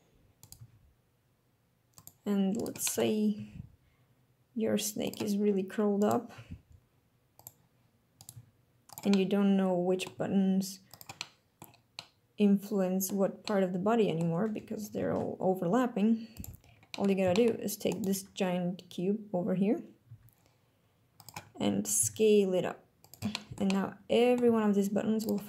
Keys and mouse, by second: 0.4 click, 0.6 g, 2.0 click, 2.6 click, 2.9 click, 3.4 g, 5.1 click, 6.0 click, 6.4 g, 7.4 click, 8.4 g, 8.9 click, 9.2 click, 10.2 g, 10.9 click, 11.3 click, 12.0-13.1 drag, 13.5 click, 15.1 ctrl+Tab, 17.0 click, 17.4 shift+drag, 20.1 g, 21.2 click, 22.0 s, 23.1 click, 23.5 click, 23.6 middle click, 24.5 g, 25.3 click.